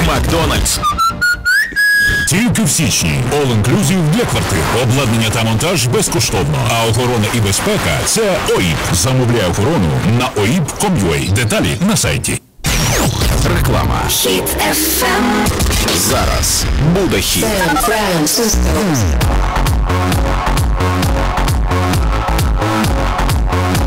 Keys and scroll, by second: 9.6 Page_Down.